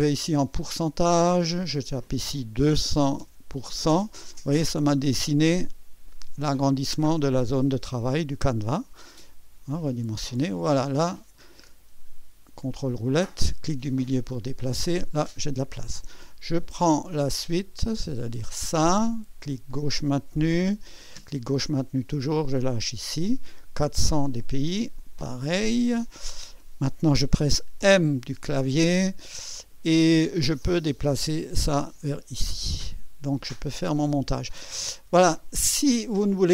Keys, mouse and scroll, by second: 0.8 click, 1.6 click, 2.7 2, 3.0 KP_0, 3.6 KP_Enter, 9.8 click, 10.5-11.1 scroll down 4, 11.6-12.2 scroll down 5, 12.9 ctrl+scroll down 2, 13.5 ctrl+middle click, 14.5 ctrl+scroll up 2, 16.9 click, 18.4-19.4 drag, 19.6-21.4 drag, 22.0 click, 25.0 click, 27.8 m, 30.6-35.2 drag, 35.6 ctrl+scroll up 2.